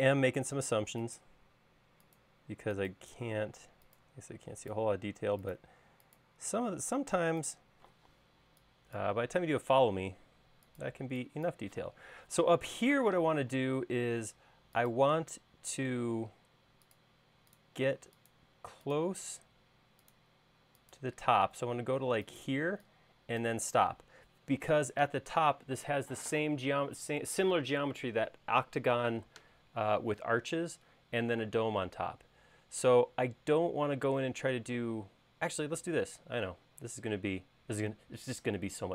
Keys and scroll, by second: 8.1-8.5 typing, 13.6 l, 22.6 e, 35.7 i.